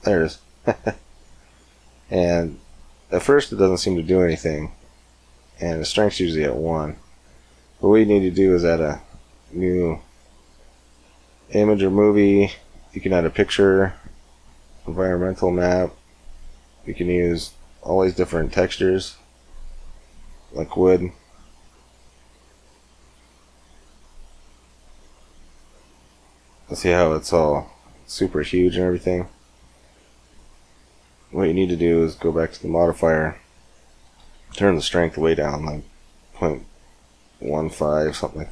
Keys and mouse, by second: 3.3-5.3 drag, 7.9-11.4 drag, 11.4 middle click, 11.9-13.7 drag, 13.7-21.9 middle drag, 21.9-25.5 drag, 25.5-26.7 middle drag, 28.7 click, 28.7-31.8 middle drag, 31.8-38.5 drag.